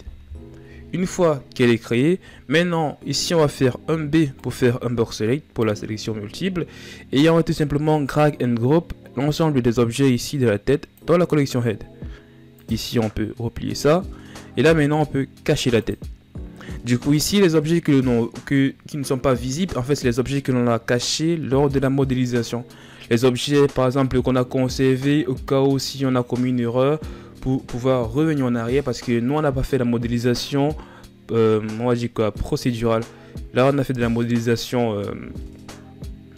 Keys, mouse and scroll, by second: 3.6 b, 7.9-11.0 drag, 12.3-14.5 drag, 15.5-18.5 drag, 19.4-22.4 scroll down 1.